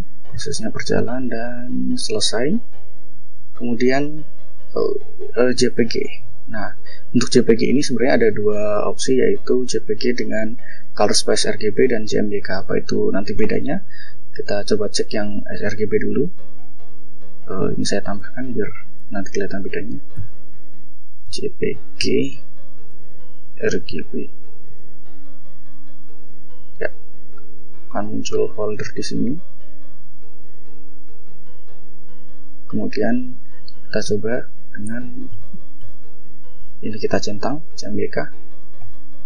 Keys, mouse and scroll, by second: 0.8-1.5 scroll down 4, 4.4 click, 5.2 click, 6.0 click, 7.4 click, 12.3 click, 17.6 click, 18.8 ctrl+Right, 19.9-24.4 typing, 26.0 click, 27.6-28.4 scroll up 4, 33.5 click, 34.5-36.1 typing, 37.0 click, 38.5 click.